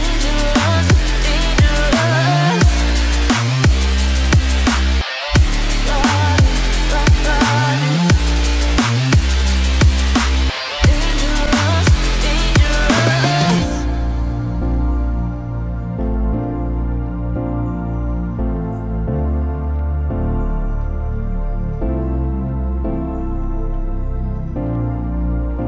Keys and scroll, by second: 2.5 ctrl+0.